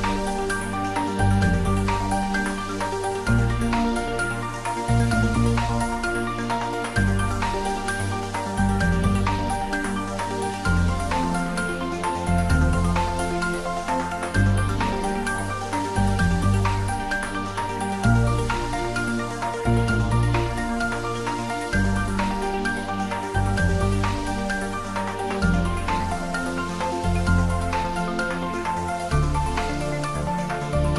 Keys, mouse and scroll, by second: 1.4 d, 1.9 y, 2.8 click, 3.1 g, 5.2 click, 5.6 r, 6.7 click, 6.9 g, 9.1 click, 9.3 s, 9.5 y, 11.5 click, 12.0 scroll down 1, 12.2-13.9 middle drag, 13.9 scroll up 1, 14.1 middle click, 14.8 shift+z, 15.0-15.3 scroll down 1, 15.3 middle click, 15.7 scroll up 1, 16.1 click, 16.5 shift+click, 16.8 shift+right click, 17.4 click, 17.6 scroll down 1, 18.1-18.4 scroll up 1, 18.4 ctrl+z, 19.9 ctrl+z, 20.1 ctrl+2, 21.9 click, 22.8 scroll down 1, 23.0 middle click, 23.3 scroll up 1, 23.6 Tab, 23.7 middle click, 24.6 ctrl+r, 25.3 click, 26.2 ctrl+r, 26.5 click, 27.1 ctrl+e, 27.5 click, 28.8 ctrl+z, 29.1 ctrl+r, 30.6 click.